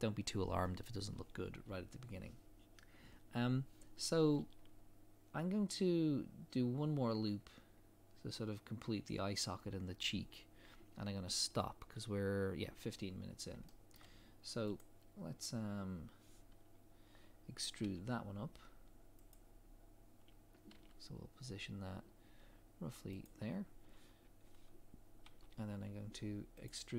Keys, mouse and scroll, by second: 4.7 scroll up 1, 7.4 scroll down 1, 13.1 scroll up 1, 13.7 shift+middle click, 14.8 click, 17.8 e, 20.7 g, 24.4 scroll down 1, 25.2 e.